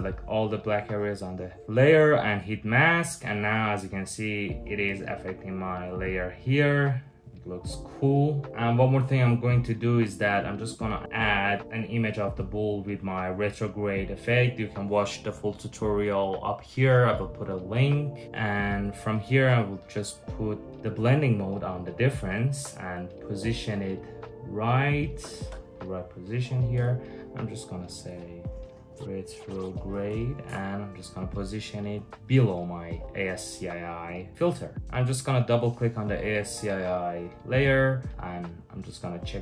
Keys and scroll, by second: 7.2-8.5 typing, 10.9 super+v, 22.9 super+t, 26.4 Return, 27.8-30.6 typing, 31.6 super+[, 34.7 BackSpace.